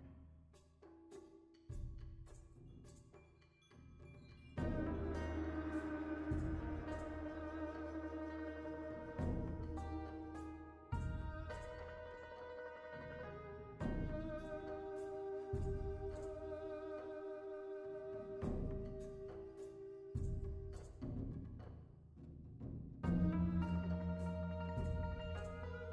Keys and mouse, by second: 0.8 click, 1.7 g, 4.5 click, 6.3-7.5 middle drag, 7.8 click, 8.5 KP_1, 9.6 click, 13.1 click, 14.4 g, 20.3 g, 21.4 KP_1, 21.9-22.4 middle drag, 22.7 g.